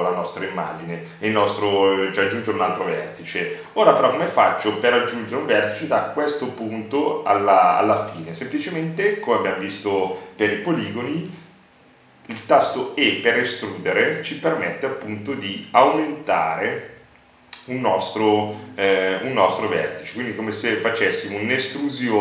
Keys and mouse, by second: 6.7 e, 12.1-13.9 drag, 14.7-17.1 drag, 17.6 click, 19.6-22.1 drag.